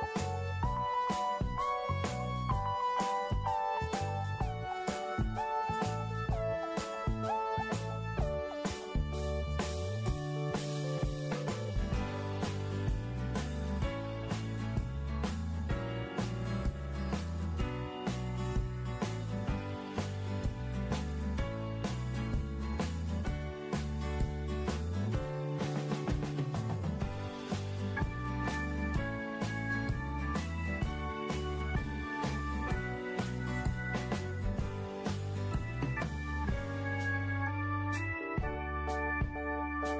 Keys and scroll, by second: 5.3 w, 14.5 4, 31.2 ctrl+shift+g, 36.0 Delete.